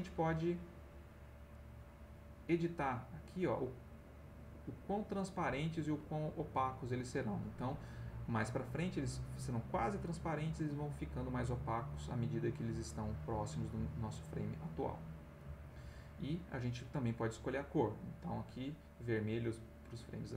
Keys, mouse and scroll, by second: 4.6 click, 5.8 Escape, 15.4 click, 16.8 click, 19.0 Escape.